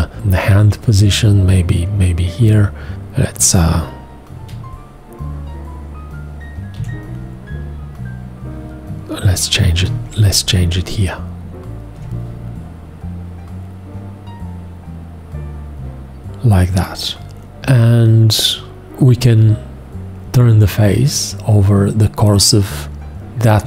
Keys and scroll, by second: 4.3 x, 6.7 1, 9.7 g.